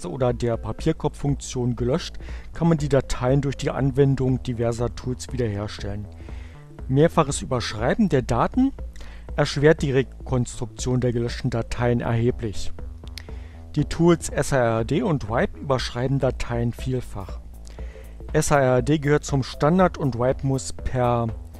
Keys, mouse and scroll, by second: 20.4-21.5 typing.